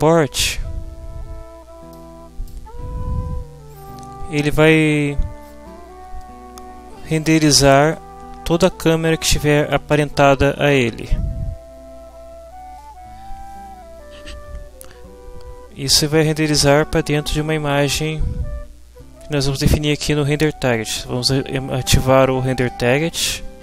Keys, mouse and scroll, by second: 1.9 click.